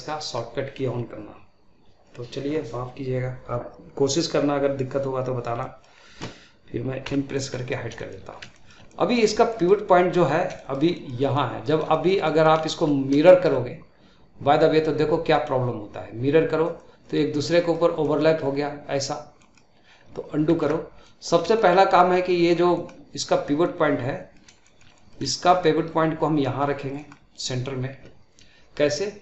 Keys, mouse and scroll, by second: 5.5-6.9 middle drag, 6.9 n, 7.2-7.6 middle drag, 7.6 scroll down 1, 7.8 shift+middle click, 8.2 scroll up 1, 8.4-10.2 shift+middle drag, 10.2 scroll down 2, 10.4-15.2 shift+middle drag, 15.2-17.3 drag, 17.3-20.4 middle drag, 20.4 ctrl+z, 20.9-22.4 middle drag, 22.4 scroll down 2, 22.6-29.2 middle drag.